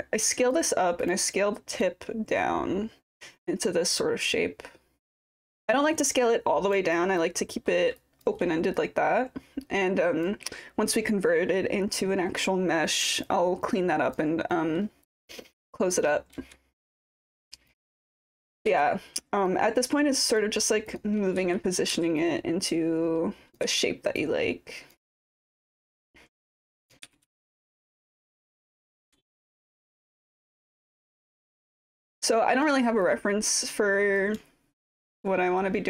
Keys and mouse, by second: 1.9-5.5 drag, 5.7 alt+click, 7.0 alt+click, 7.4 alt+middle click, 8.0 alt+click, 8.8-10.3 drag, 13.3 alt+click, 14.5 alt+middle click, 15.1 alt+click, 16.1 typing, 17.1 click, 18.0 alt+click, 18.8 w, 19.5 click, 21.0 click, 21.4 e, 21.9 w, 22.3-23.6 drag, 23.7 e, 24.2 click, 24.9 r, 26.2 click, 27.1 r, 27.3 r, 27.6-28.7 drag, 29.0 w, 29.5 click, 30.4 e, 30.8 click, 31.8 w, 32.3 click, 33.0 click, 33.5 click, 34.5 alt+click, 35.4 alt+middle click.